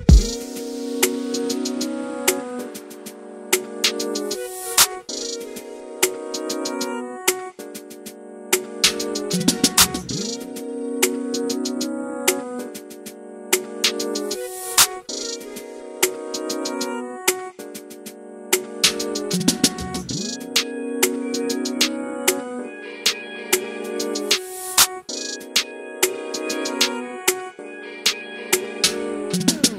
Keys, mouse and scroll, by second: 1.1 s, 2.1-3.6 middle drag, 3.6 click, 4.8 click, 5.5 alt+a, 5.9-6.5 middle drag, 6.5 scroll up 4, 6.9-7.9 shift+middle drag, 7.9 click, 8.4 click, 9.4 alt+d, 10.8 r, 13.4 s, 14.4 click, 15.3 click, 16.0 alt+a, 17.1 click, 19.4-20.3 shift+middle drag, 20.3 click, 22.3 shift+d, 23.5 Tab, 23.9 click, 24.8 click, 28.9 a.